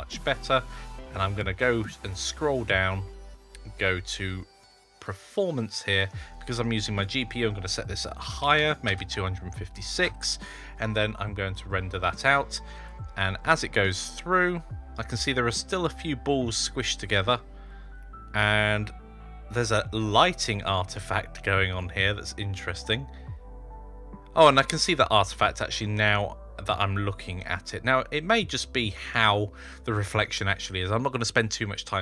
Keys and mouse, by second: 4.9 click, 6.6-10.1 drag, 12.0 F12, 12.0-24.0 drag.